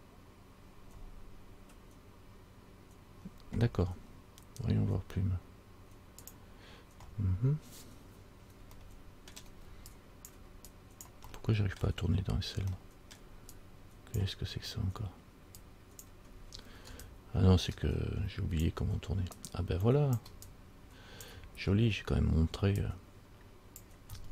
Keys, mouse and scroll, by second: 4.2 scroll up 3, 4.9-6.5 scroll up 3.